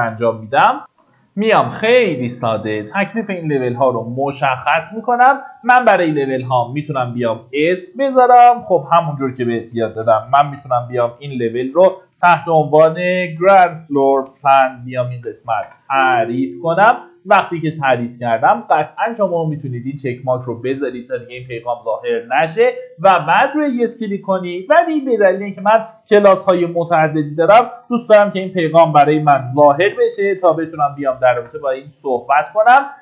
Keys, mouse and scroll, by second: 0.9 F9, 6.0-7.3 drag, 8.2-14.9 typing, 15.5 Return, 22.9 click, 26.4-30.9 typing, 31.3 Return, 32.9 click.